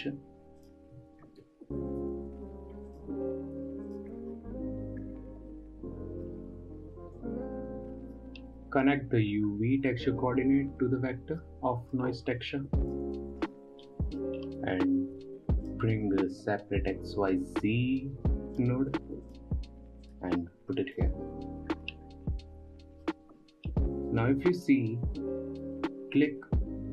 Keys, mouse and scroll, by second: 0.4 shift+a, 4.8-5.5 scroll up 8, 6.0-7.7 middle drag, 7.7 click, 9.1-10.4 middle drag, 10.4-12.0 drag, 12.0-13.3 middle drag, 13.3 click, 13.9-14.3 scroll down 5, 14.3-15.3 middle drag, 15.3 shift+a, 20.5-22.2 drag, 22.2-22.8 scroll up 6, 22.8-23.8 middle drag, 23.8-24.5 scroll down 5, 24.6-26.9 middle drag.